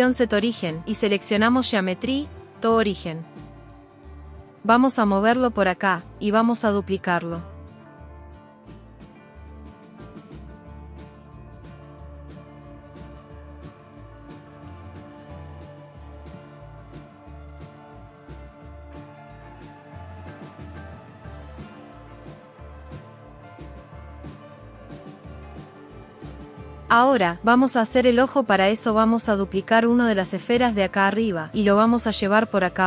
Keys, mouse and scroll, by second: 4.2 click, 4.6 g, 6.4 shift+s, 6.6 shift+d, 8.9-16.8 typing, 9.9 click, 10.2 click, 10.7 click, 11.4 click, 11.8 click, 12.9 click, 15.6 click, 16.3 click, 18.5 click, 18.8 click, 19.0-20.9 typing, 19.7 click, 20.0 click, 20.9 click, 21.2 click, 21.4 click, 22.6 shift+d, 22.9 s, 25.4 g, 25.6 click, 29.1 click, 31.0 shift+d.